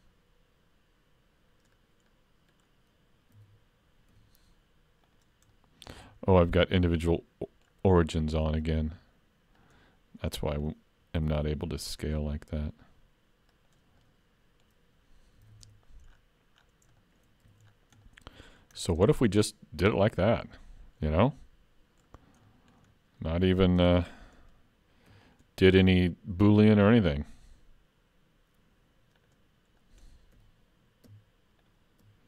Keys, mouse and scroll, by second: 2.1 middle click, 3.4 alt+a, 4.1 3, 5.0 click, 5.5 middle click, 6.0 scroll up 1, 6.7 shift+click, 7.1 middle click, 8.6 click, 10.3 middle click, 11.2 s, 14.0 middle click, 15.5 alt+a, 15.6 Tab, 16.1-16.9 scroll down 10, 17.0 shift+middle click, 17.5 alt+a, 17.7-18.5 scroll down 2, 18.1 middle click, 18.8-19.1 scroll down 2, 19.1 shift+middle click, 19.5 middle click, 20.3-20.6 scroll up 3, 20.6 shift+middle click, 21.3 middle click, 22.2-23.3 scroll up 4, 22.5 shift+middle click, 23.2 middle click, 23.8 Tab, 25.1 3, 25.3 click, 26.5 x, 29.8 middle click, 30.4 2, 31.6 alt+click.